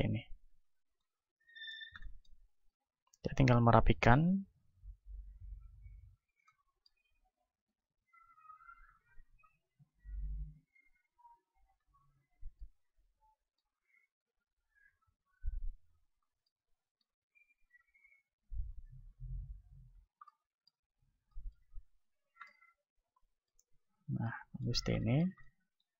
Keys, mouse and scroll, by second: 2.5-9.8 right drag, 4.9-9.0 middle drag, 9.0-12.8 drag, 10.5-12.3 right drag, 12.8-15.2 middle drag, 14.0-16.1 right drag, 15.2-17.0 drag, 16.4-18.2 middle drag, 17.7-19.3 right drag, 18.2-20.3 drag, 19.3 Tab, 20.0 Tab, 20.3-25.9 middle drag, 22.0 a.